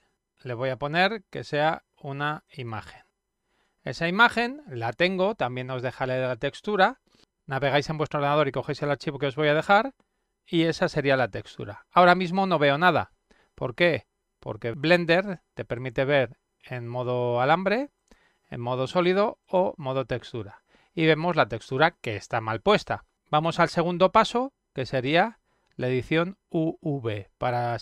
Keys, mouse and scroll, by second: 0.0 click, 2.5 click, 15.7 click, 17.9 click, 19.4 click, 27.5 click.